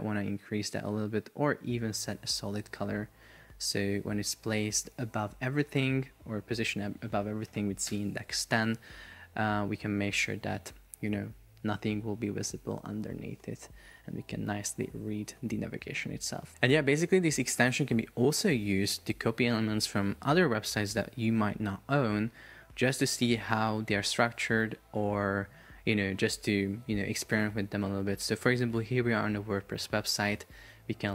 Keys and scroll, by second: 7.9 Return.